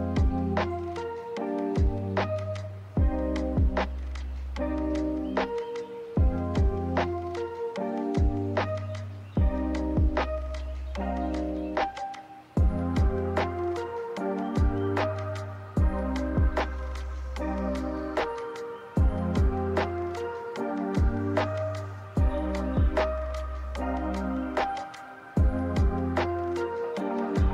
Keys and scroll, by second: 5.8 w, 6.9 w, 18.8 a.